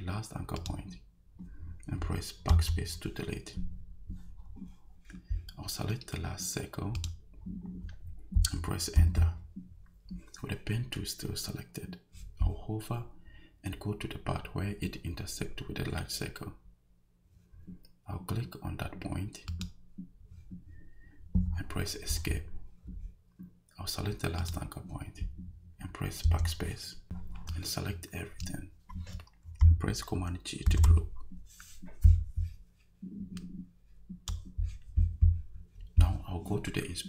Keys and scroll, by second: 2.5 BackSpace, 9.0 Return, 22.1 Escape, 26.2 BackSpace, 30.7 super+g.